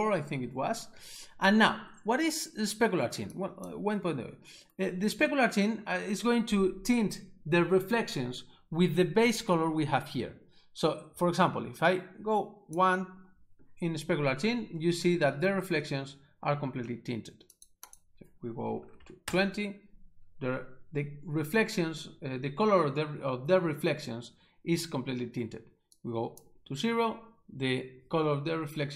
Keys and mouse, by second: 3.4 click, 11.9 click, 17.6 click, 17.9 double click, 18.8 2, 19.0 0, 19.2 Return, 26.0 click.